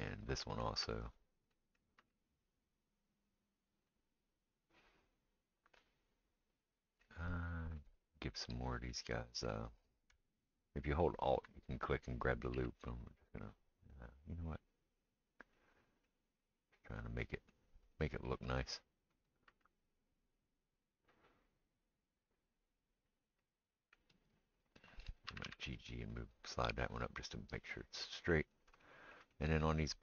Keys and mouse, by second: 1.1 click, 2.1 g, 10.1-11.7 alt+middle drag, 11.1 alt+click, 12.5 g, 14.8-17.5 middle drag, 16.3 g, 18.5-20.8 drag, 19.6 g, 19.9 middle click, 20.9-26.0 middle drag, 23.7-30.0 right drag, 25.3 g, 27.6-30.0 middle drag.